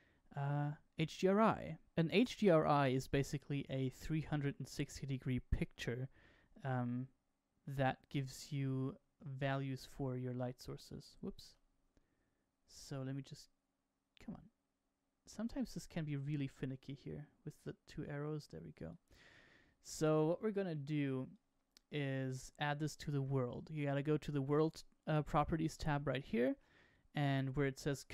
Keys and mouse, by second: 3.8-5.6 middle drag, 9.6 click, 11.3 n, 17.5-19.0 drag, 21.0-22.0 drag, 22.3-22.6 shift+middle drag.